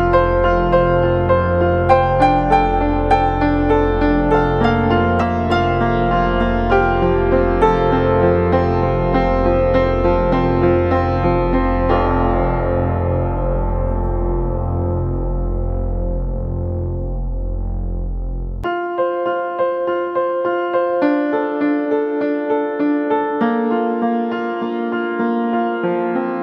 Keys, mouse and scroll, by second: 1.5 ctrl+=, 2.1 space, 3.4 ctrl+click, 3.7 ctrl+click, 4.2 ctrl+click, 4.6 ctrl+click, 5.1 ctrl+click, 5.6 ctrl+click, 6.0 ctrl+click, 6.2 ctrl+click, 6.7 double click, 6.7 ctrl+click, 7.2 ctrl+click, 7.5 space, 7.8 ctrl+click, 8.6 double click, 8.6 ctrl+click, 8.9 ctrl+click, 9.3 ctrl+click, 9.9 ctrl+click, 10.3 ctrl+click, 10.9 ctrl+click, 11.2 ctrl+click, 11.8 ctrl+click, 12.2 ctrl+click, 12.6 ctrl+click, 12.8 space, 13.8 ctrl+click, 14.4 ctrl+-, 14.7 double click, 20.9 ctrl+Return, 22.8 Delete.